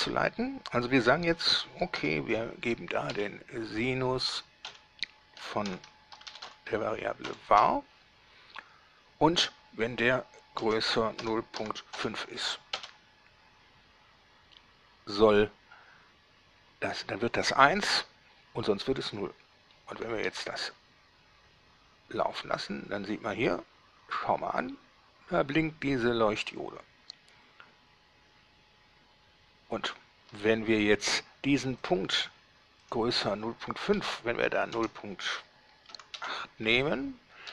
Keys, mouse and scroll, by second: 1.8 s, 2.2 i, 4.9-7.5 typing, 10.8 shift+,, 11.4 0, 11.8 ., 12.2 5, 13.0 Return, 20.5 alt+a, 30.5 Escape, 32.1 click, 33.1 click, 34.2 Right, 35.0 BackSpace, 36.2 8, 36.4 Return.